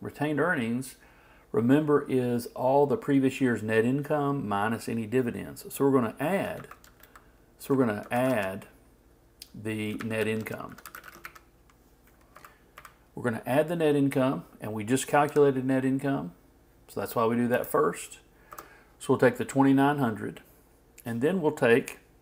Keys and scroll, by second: 6.6-8.6 typing.